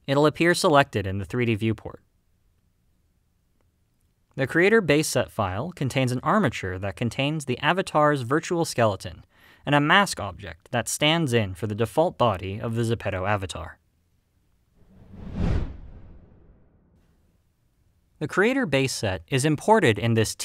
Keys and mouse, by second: 4.0-5.3 shift+middle drag, 6.5-7.0 shift+middle drag, 7.5 click, 10.6 click.